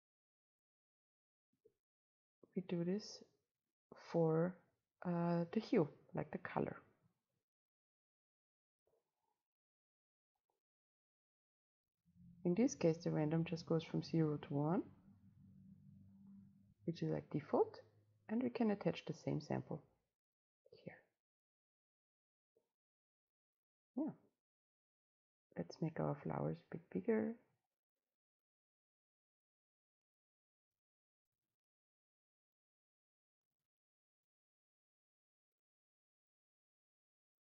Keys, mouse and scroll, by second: 0.8 click, 1.7 ctrl+v, 6.6-10.7 drag, 10.7-12.7 middle drag, 12.7-15.7 drag, 16.4 middle click, 17.4-21.9 drag, 21.9-25.9 right drag, 27.0 right click, 30.1-33.8 right drag, 33.8-36.2 drag, 36.6-37.4 right drag.